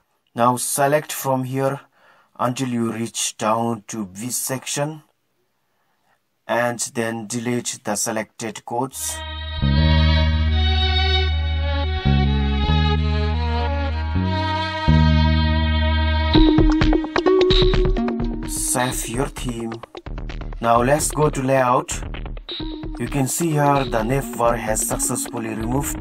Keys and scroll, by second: 14.0 Delete, 15.2-16.7 typing.